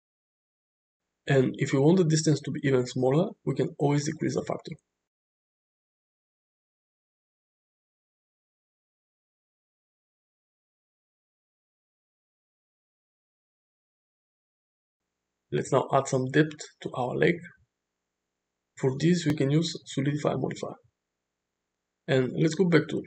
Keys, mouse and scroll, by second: 0.2-0.6 middle drag, 1.0-1.5 shift+middle drag, 2.4 click, 2.7 click, 4.4-6.7 shift+drag, 7.1-9.9 drag, 10.6-11.5 middle drag, 12.5 middle drag, 12.8 space, 15.9 click, 16.5 click, 17.4-19.5 drag, 20.3 middle click, 21.3 middle click, 22.9-23.0 right drag.